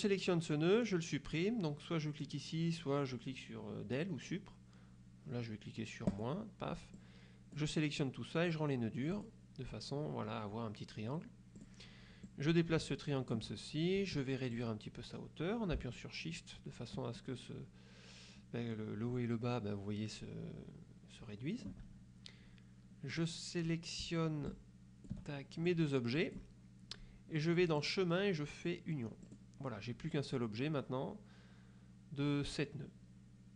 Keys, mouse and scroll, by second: 6.2 click, 7.1 click, 9.2 click, 11.7 click, 12.4-13.6 drag, 14.6-22.0 drag, 23.2 click, 24.6 shift+click, 25.8 click, 27.9 click, 29.4 click.